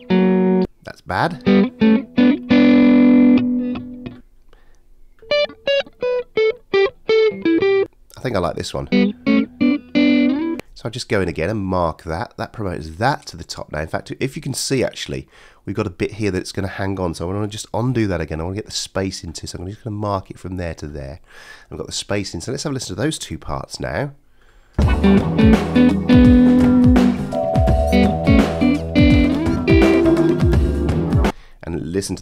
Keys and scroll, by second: 17.7 super+z, 24.7 space.